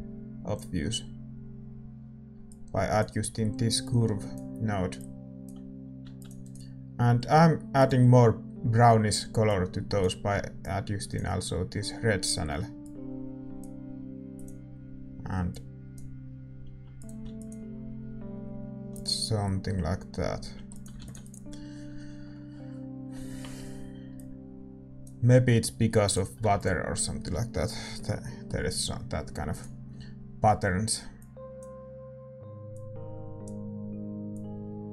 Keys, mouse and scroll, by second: 6.2 ctrl+s, 17.6 ctrl+s, 21.0 ctrl+s, 26.7 ctrl+s.